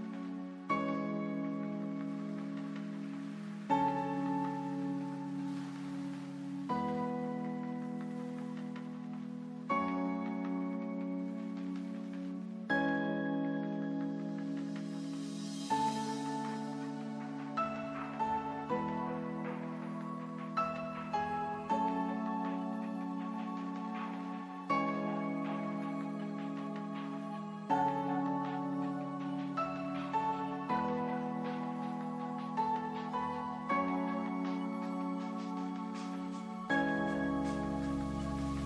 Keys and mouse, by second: 1.8-5.7 right drag, 9.2-10.4 right drag, 10.4-15.3 middle drag, 15.3-19.6 drag, 19.6 s, 26.6 s, 32.1 middle click, 33.0 Tab, 35.9-37.5 drag, 37.5 Tab, 38.3 ctrl+Tab.